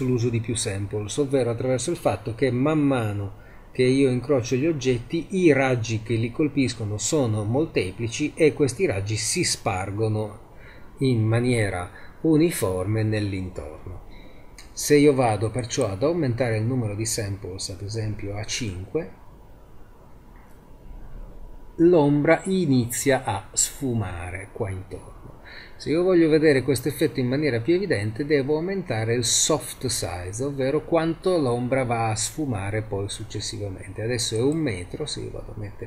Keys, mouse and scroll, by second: 15.7 click, 19.0-22.9 middle drag, 34.4 click.